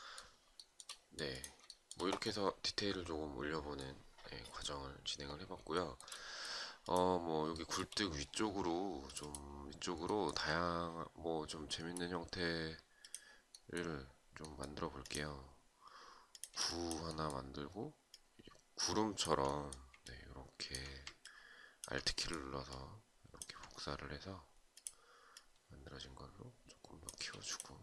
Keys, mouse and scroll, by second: 0.1 shift+right click, 1.2 shift+right click, 5.2 shift+right click, 7.1 shift+right click, 15.8 shift+click, 17.6 alt+click, 19.5 alt+click, 20.7 alt+click, 22.2 alt+click.